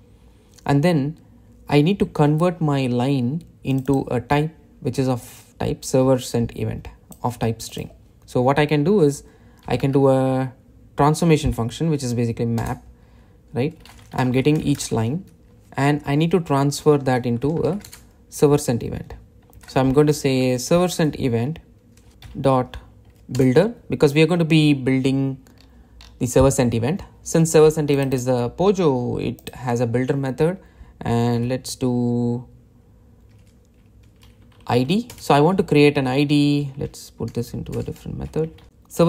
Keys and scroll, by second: 13.1 Return, 14.8 Return, 21.5 Return, 23.9 Return, 35.7 Return.